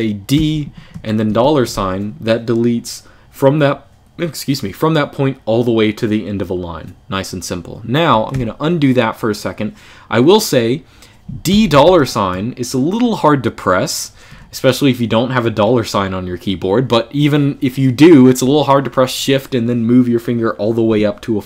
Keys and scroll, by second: 0.1 d, 1.0 $, 8.1 u, 11.3 d, 11.6 $, 14.0 u.